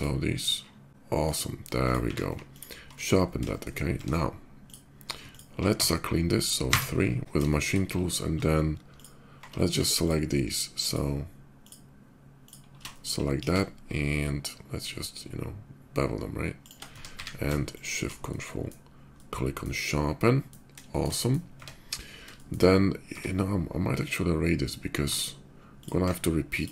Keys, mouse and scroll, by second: 0.9 middle click, 0.9 x, 1.5 click, 2.1 ctrl+q, 2.3 click, 2.7 ctrl+middle drag, 3.3 shift+middle drag, 3.7 Tab, 4.4 click, 5.0 ctrl+alt+click, 5.5 Tab, 6.4 3, 7.0 Tab, 7.2 shift+middle click, 7.5 shift+middle click, 8.7 ctrl+alt+click, 9.8 ctrl+alt+shift+click, 10.6 ctrl+alt+shift+click, 11.4 ctrl+alt+shift+click, 12.2 ctrl+alt+shift+click, 12.6 ctrl+alt+shift+middle click, 13.4 ctrl+shift+b, 14.1 ctrl+shift+b, 14.1 middle click, 15.4-16.4 shift+middle drag, 16.4 shift+click, 16.6 Tab, 17.2 q, 17.5 ctrl+shift+click, 18.0-18.4 ctrl+shift+middle drag, 18.9-19.4 ctrl+shift+middle drag, 19.8-20.2 ctrl+shift+middle drag, 20.7 shift+middle click, 20.9 middle click, 21.4 Tab, 22.1 shift+middle click, 22.9 Tab, 25.4 click, 26.3 shift+click.